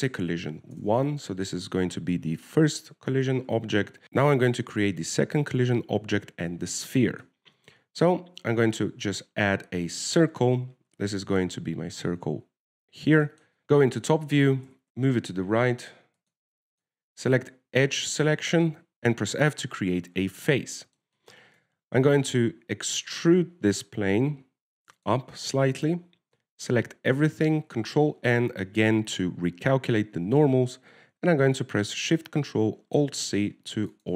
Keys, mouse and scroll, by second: 0.2 l, 8.6 middle click, 9.9 shift+a, 11.8 middle click, 13.6 scroll up 4, 13.6 shift+KP_7, 13.7 shift+middle click, 14.2-14.6 scroll up 2, 14.9 Tab, 14.9 g, 17.6 click, 18.1 click, 21.5 Tab, 21.9 middle click, 22.5 shift+middle click, 22.9 Tab, 23.6 e, 26.6 middle click, 27.7 a, 27.8 a, 29.0 ctrl+n, 29.4 Tab.